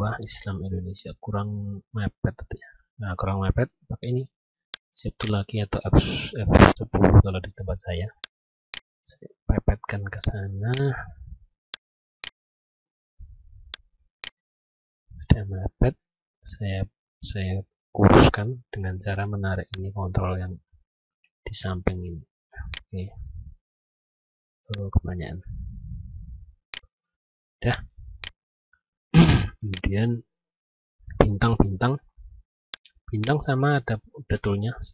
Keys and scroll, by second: 15.1 F9.